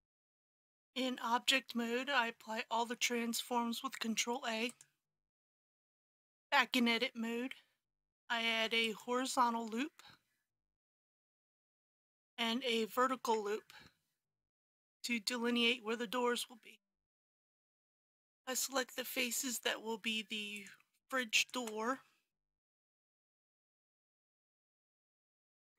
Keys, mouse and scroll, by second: 0.7 Tab, 3.0 ctrl+a, 4.7 click, 5.9 Tab, 8.5 ctrl+r, 8.8 click, 13.1 ctrl+r, 14.4 click, 18.9 middle click, 20.5 shift+click, 21.4 shift+click, 21.9 middle click, 23.3 shift+click, 24.1-25.7 middle drag.